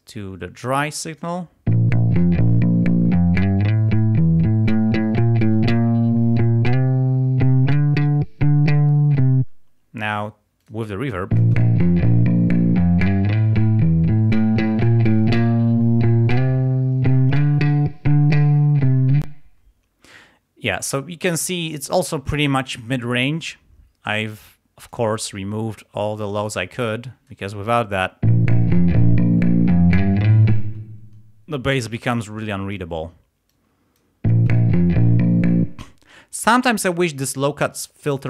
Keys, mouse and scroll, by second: 1.2 click, 1.8 space, 9.5 space, 10.6 click, 11.4 space, 19.3 space, 24.1-25.1 drag, 25.8-27.5 drag, 28.3 space, 30.6 space, 32.4 click, 34.4 space, 35.8 space.